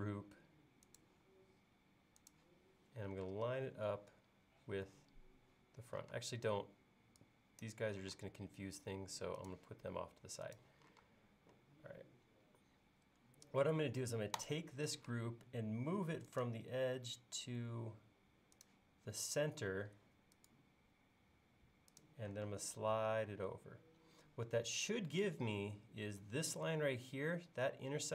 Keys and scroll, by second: 3.3 space, 6.2 space, 8.1 m, 11.1 space, 15.0 m, 22.5 space.